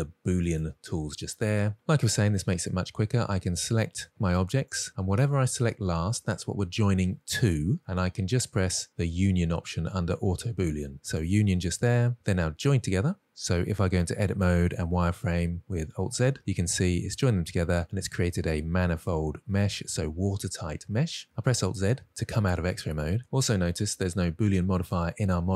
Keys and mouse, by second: 0.5 click, 3.9 click, 4.7 shift+click, 11.2 click, 12.1-13.7 middle drag, 14.2 Tab, 15.9 alt+z, 16.3-20.9 middle drag, 21.5 alt+z.